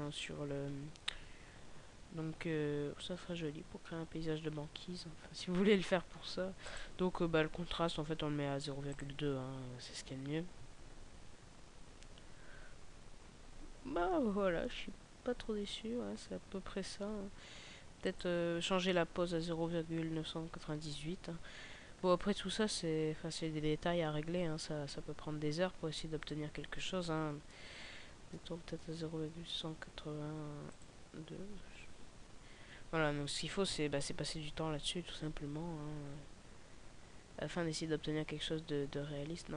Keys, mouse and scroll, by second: 2.1 Escape, 6.6 click.